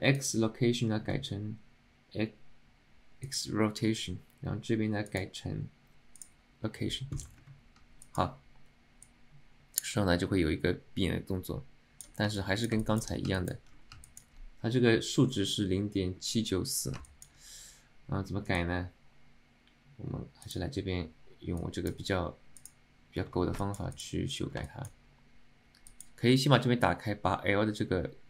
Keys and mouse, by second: 8.2 alt+middle click, 9.3-12.2 drag, 12.5 alt+middle drag, 12.9 alt+shift+middle drag, 13.5 alt+middle click, 14.1 alt+middle click, 17.1 alt+shift+middle click, 18.7-20.8 right drag, 22.7 click.